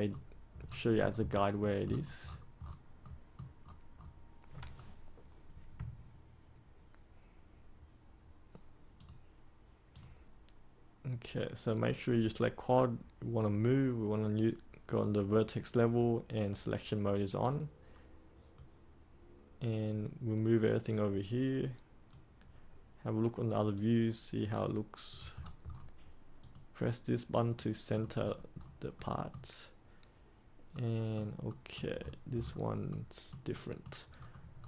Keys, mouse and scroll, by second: 0.6 scroll up 1, 0.8-1.2 scroll down 1, 1.2 middle click, 1.8-3.0 scroll up 1, 3.0 middle click, 3.3 scroll up 1, 3.5-3.9 scroll down 1, 3.9-4.6 scroll up 1, 4.6-8.9 scroll down 1, 8.9 click, 17.4-18.8 right drag, 19.7-24.9 drag, 25.3-26.3 scroll down 1, 26.3 click, 27.5 middle click, 28.2-28.6 scroll up 1, 28.9-31.4 middle drag, 31.9-32.8 scroll up 1, 32.8 middle click, 34.1-34.5 scroll up 1, 34.5-34.6 scroll down 1.